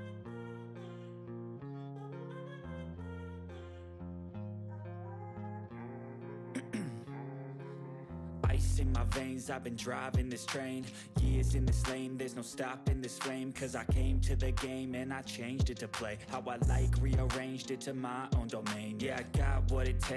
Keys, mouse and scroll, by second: 0.5 Return, 3.6 Return, 3.6-4.8 typing, 7.7 click, 13.9 click, 13.9-15.6 drag, 15.4-18.0 typing.